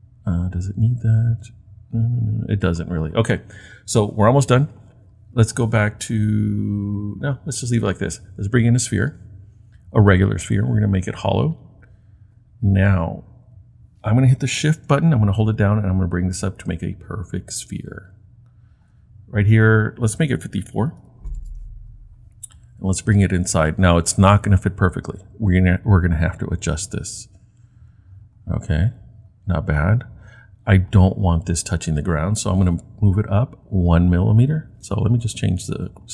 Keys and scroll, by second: 20.5-21.5 typing.